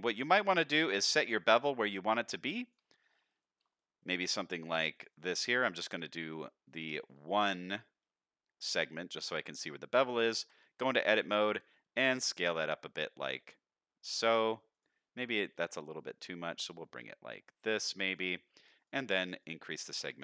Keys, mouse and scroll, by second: 3.0 scroll down 2, 3.4 shift+middle click, 3.8 middle click, 4.7 click, 4.9 click, 5.1 click, 6.4 middle drag, 6.9 scroll up 1, 7.2 shift+middle drag, 8.8-9.9 middle drag, 10.3 Tab, 11.6 s, 15.6-18.1 shift+drag, 18.8 click, 19.0 click, 19.3 click, 19.9 middle click.